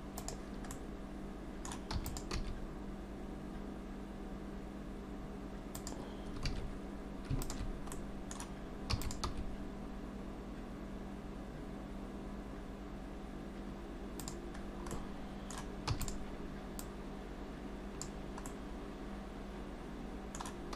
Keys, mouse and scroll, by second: 0.7 middle click, 2.0 e, 2.4 s, 6.5 alt+a, 7.4 alt+shift+click, 7.9 middle click, 9.0 e, 9.3 s, 14.6 scroll down 2, 14.9 middle click, 15.9 e, 16.8 click, 18.5 middle click.